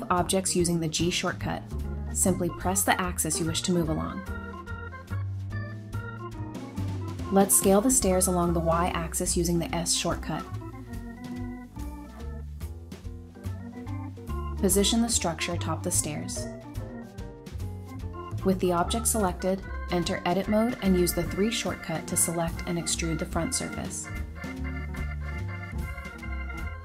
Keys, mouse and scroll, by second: 0.4 typing, 2.1 typing, 3.2 scroll up 1, 3.7 typing, 4.8 scroll down 1, 5.0 middle click, 5.7 scroll up 1, 6.5 typing, 7.6-8.6 typing, 10.7-11.2 scroll up 1, 11.1-13.0 typing, 14.4 middle click, 15.2 scroll up 1, 15.6 g, 16.3 z, 17.0 double click, 17.4 middle click, 18.4 3, 18.9 double click, 19.8 middle click, 20.1-20.5 scroll down 1, 20.5 typing, 22.1 Tab, 22.6-24.4 typing, 25.5 middle click.